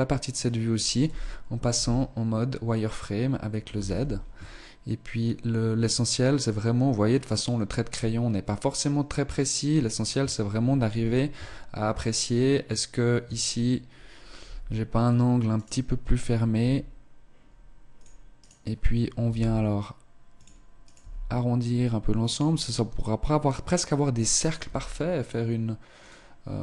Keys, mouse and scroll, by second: 0.1-1.7 scroll up 1, 0.1 z, 1.7 z, 3.3-6.4 scroll down 1, 6.4 z, 9.7 Tab, 10.1 Tab, 10.9 z, 11.3 Tab, 13.2 Tab, 14.4 z, 15.5 right click, 16.5 g, 18.3 right click, 19.2 g, 20.9 g, 24.4 right click, 24.6 g.